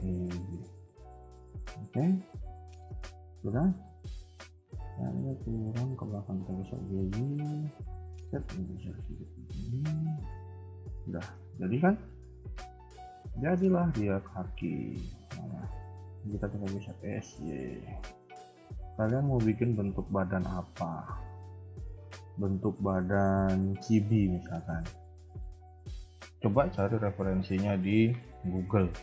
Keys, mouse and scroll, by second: 0.6 Tab, 0.9 middle click, 1.6 KP_3, 2.1 shift+middle click, 2.5-2.8 scroll down 4, 3.0 shift+middle click, 3.2-4.4 scroll up 5, 3.8 shift+middle click, 4.3 a, 4.4 a, 5.2 alt+click, 6.1 g, 8.2 r, 10.3-10.6 scroll down 2, 10.6 middle click, 11.4 KP_1, 12.0 KP_3, 12.8-13.3 scroll down 5, 13.3 shift+middle click, 13.7 scroll down 1, 14.0-14.7 scroll up 8, 15.1 alt+click, 16.2 s, 17.6-18.2 scroll down 5, 17.7 KP_1, 18.4 shift+middle click, 18.7-19.2 scroll up 1, 19.2 scroll up 1, 19.3-21.6 typing, 20.8 scroll down 1, 21.3 shift+middle click, 22.1-23.9 scroll up 5, 22.5 shift+middle click, 23.9 scroll up 1, 24.4 ctrl+s.